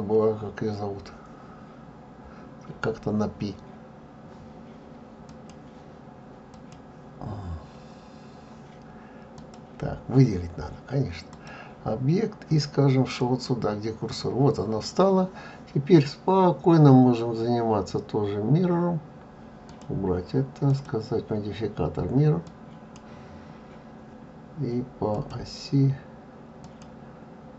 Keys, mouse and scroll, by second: 9.4 click, 19.8 click, 20.8 click, 26.8 click.